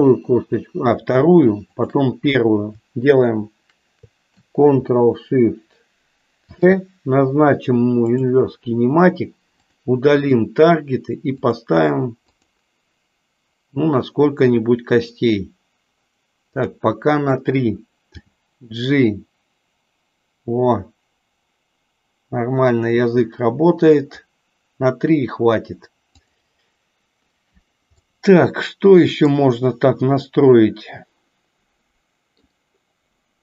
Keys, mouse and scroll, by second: 8.2 ctrl+shift+c, 10.2 click, 11.5 click, 11.9 click, 12.5 click, 18.2 g, 28.1-29.3 middle drag, 31.0-32.4 middle drag.